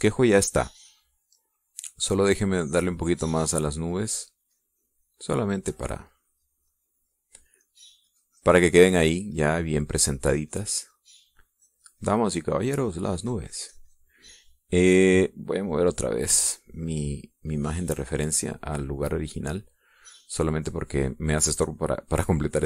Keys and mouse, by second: 1.7 middle click, 2.5 middle click, 3.1 middle click, 4.3-9.1 drag, 9.8-12.9 drag, 13.3-15.9 drag, 18.1 click, 19.2-21.3 drag, 21.5 click.